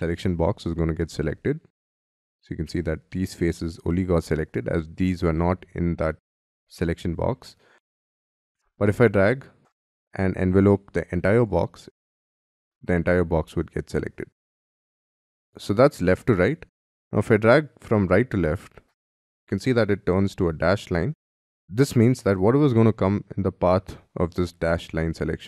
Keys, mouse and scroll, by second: 6.8 middle click.